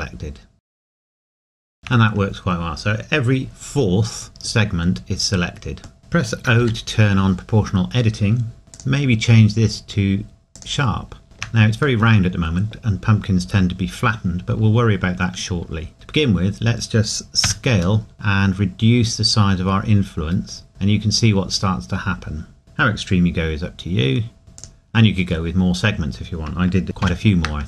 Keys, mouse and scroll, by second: 6.0-6.6 scroll down 1, 6.6 o, 8.7 click, 11.2 shift+middle click, 12.8 scroll down 1, 13.0 scroll up 1, 13.2 scroll down 1, 17.4 s, 21.2 scroll up 1, 21.6-22.0 scroll down 1, 24.6 click, 27.0 ctrl+z.